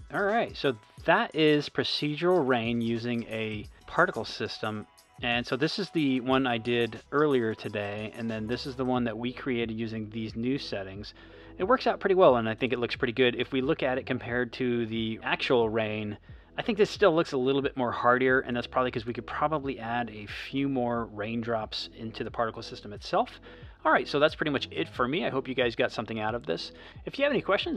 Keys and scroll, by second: 0.3 space, 2.6 space, 5.1 space, 11.8 space, 16.9 space, 19.2 space, 21.6 space.